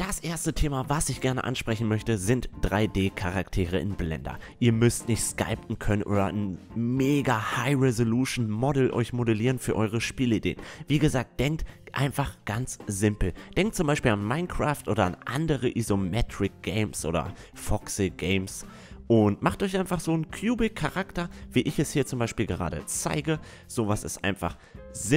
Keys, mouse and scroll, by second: 0.1 s, 2.0 KP_1, 3.6-4.7 drag, 4.7 Tab, 7.2 i, 10.0 e, 14.5 e, 14.8 s, 19.4-21.3 middle drag, 20.7 s, 22.5 e, 23.4 a, 24.2 click.